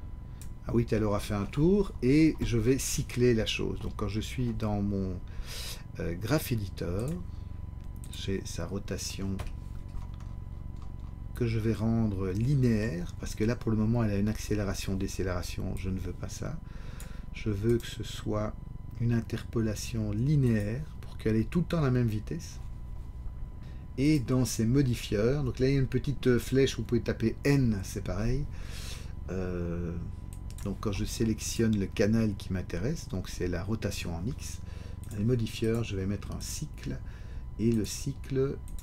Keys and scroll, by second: 9.3 ..